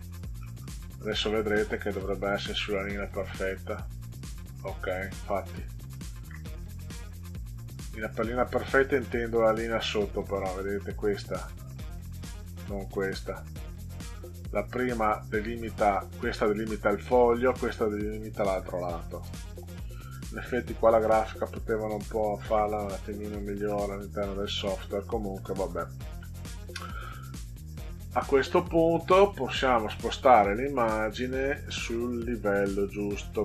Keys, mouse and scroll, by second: 0.3 middle click, 1.5 middle click, 2.5 click, 7.4 click, 8.7-10.0 drag, 13.9 click, 20.2 ctrl+z, 20.8 ctrl+z, 21.8 ctrl+z, 23.0 middle click, 23.6 middle click, 25.3 middle click, 26.7 middle click, 30.0 right click.